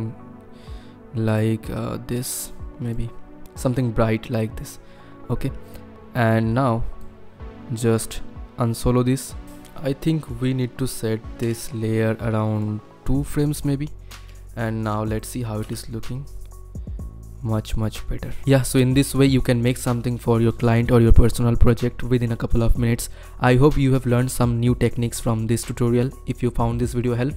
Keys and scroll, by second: 9.4 ctrl+KP_Decimal, 11.4 =, 15.6 space.